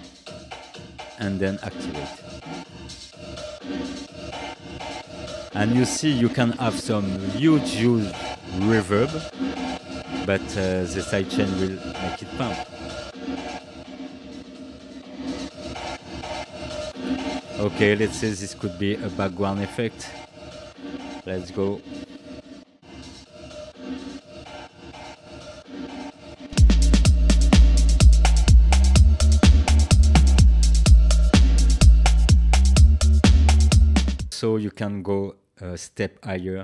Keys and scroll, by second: 34.3 space.